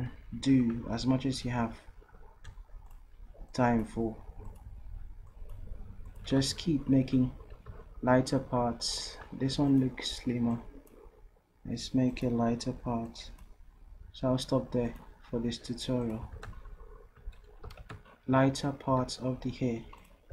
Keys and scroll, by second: 16.5 v, 17.7 v.